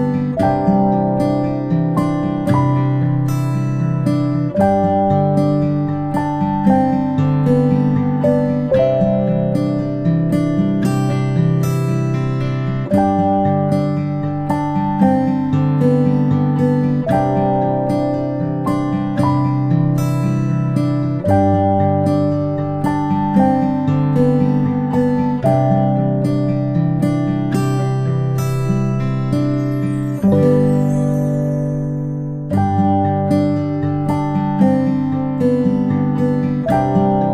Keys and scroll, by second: 20.9 ctrl+shift+z, 23.5 ctrl+z, 25.4 ctrl+[, 25.8 ctrl+[.